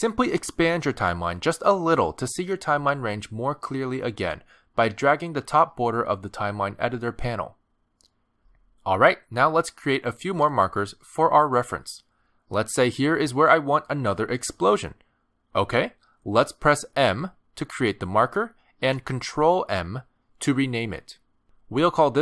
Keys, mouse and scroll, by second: 4.0 click, 4.8 click, 5.6 click, 6.5 click, 8.3 click, 11.9 click, 13.6 click, 17.6 m, 20.1 ctrl+m.